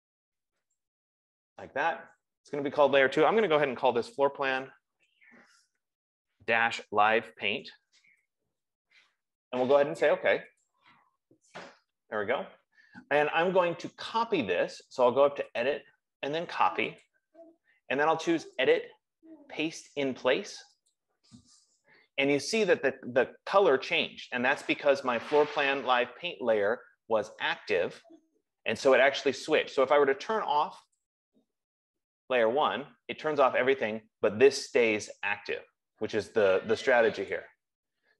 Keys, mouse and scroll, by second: 1.2 click, 4.2-8.9 typing, 11.1 click, 16.0 click, 17.3 click, 19.2 click, 21.5 click, 31.6 click, 37.7 click.